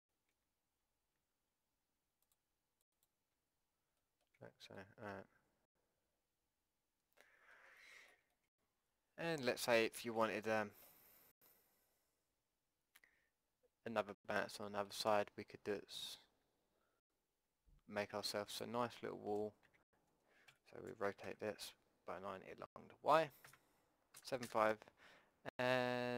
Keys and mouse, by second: 0.3 Tab, 1.2 a, 2.3 click, 3.3 a, 4.0 click, 4.4 Tab, 8.6-13.4 middle drag, 14.6 middle click, 18.5 click, 19.7 Tab, 20.5 r, 24.1 KP_7, 24.5 KP_5.